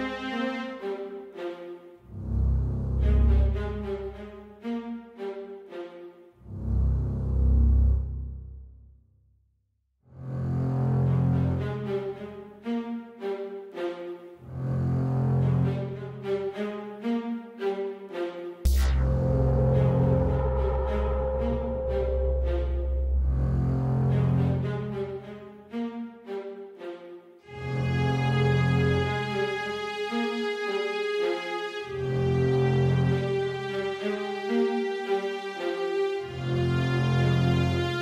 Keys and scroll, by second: 4.8 Left, 5.1 Right, 5.5 Down, 5.8 Left, 6.0 Up, 6.2 Up, 8.8 Right, 9.7 Up, 11.4 super+a, 18.0 super+a, 23.0 Escape.